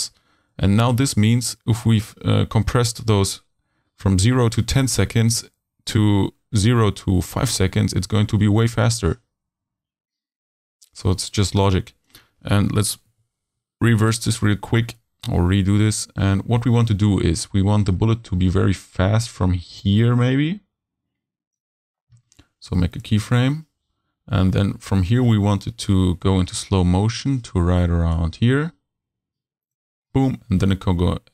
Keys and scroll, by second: 13.1 super+z.